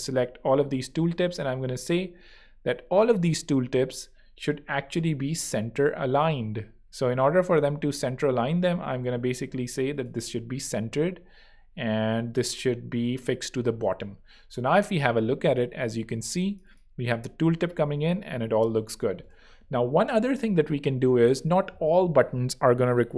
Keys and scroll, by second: 13.8 super+3, 18.6 super+2.